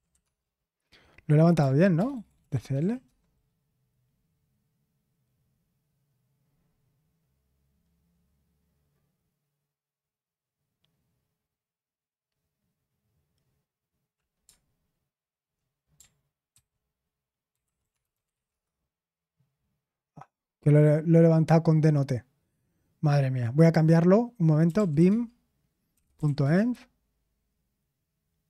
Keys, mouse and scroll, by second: 1.0 typing, 2.8-3.5 typing, 17.2-18.8 typing, 25.8-26.7 typing.